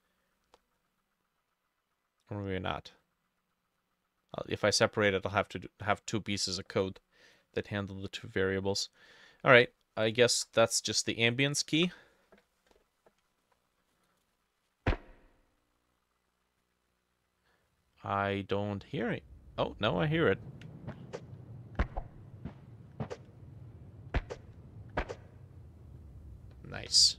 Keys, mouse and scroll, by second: 10.3 ctrl+v, 11.0 middle click, 11.8 F6.